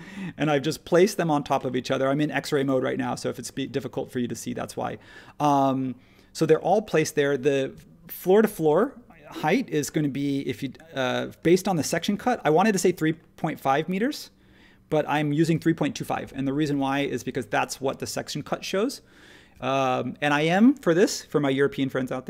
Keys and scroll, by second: 10.1 t, 16.0 ⟲.